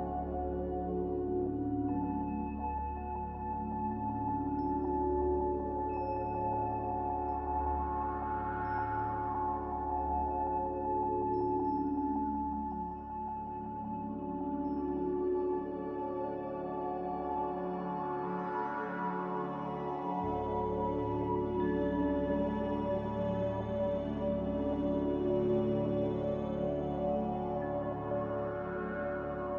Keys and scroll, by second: 12.8 m, 16.9 Escape, 25.4 v, 26.2 z.